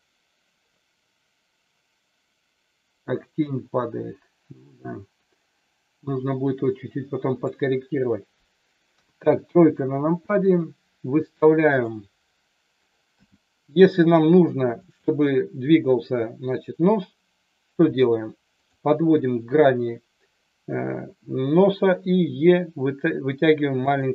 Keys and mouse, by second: 8.9 KP_3, 11.8 click, 13.1 g, 14.8 click, 17.8 g, 18.5 click, 21.8 e, 23.8 click.